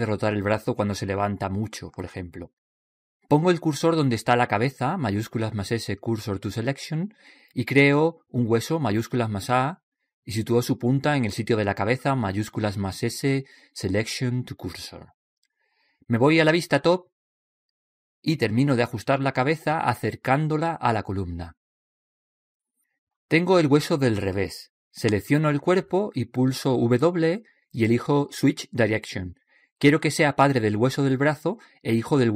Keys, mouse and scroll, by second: 5.3 right click, 6.3 shift+s, 9.6 shift+a, 12.7 shift+s, 18.2 KP_7, 19.8 click, 21.7-23.7 drag, 26.0 right click, 27.6 w.